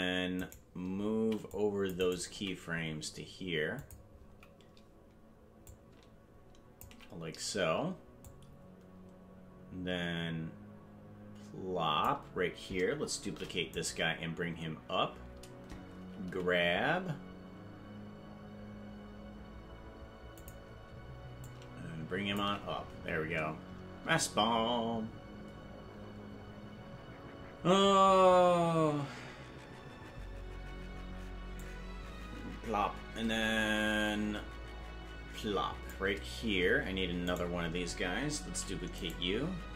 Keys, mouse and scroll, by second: 1.2 c, 2.3 g, 5.6-6.9 ctrl+drag, 8.3-12.1 drag, 13.4 shift+d, 16.2 g, 21.4-22.4 ctrl+drag, 31.6-36.0 drag, 37.4 right click, 38.6 shift+d.